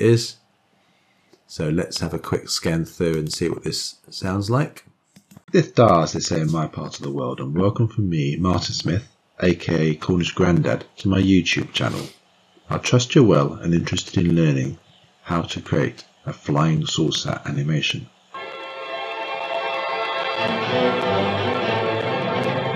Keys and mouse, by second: 3.8 click, 5.8 click.